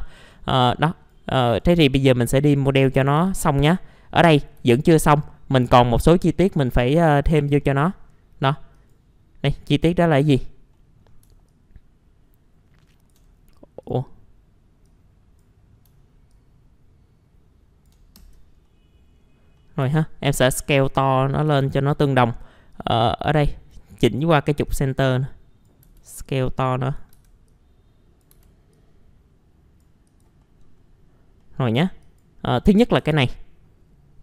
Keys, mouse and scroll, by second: 0.2 click, 1.5 right click, 2.4 click, 2.8-3.2 typing, 3.4-4.6 scroll down 1, 4.6 w, 5.9 click, 6.9 middle click, 7.4 F4, 7.6 middle click, 8.4-8.7 scroll up 1, 8.7 click, 9.4 middle click, 10.0-10.7 scroll down 1, 10.7 middle click, 11.0 scroll down 1, 11.5-13.1 shift+drag, 13.8 click, 16.3 shift+click, 18.6 middle click, 19.1 scroll up 1, 19.6 middle click, 20.6 click, 21.6 ctrl+z, 22.7-25.8 drag, 25.8 w, 26.2-30.0 drag, 30.4 middle click, 30.7 scroll up 1, 31.4 middle click, 32.0 click, 32.6-33.0 scroll up 1, 33.0 F4.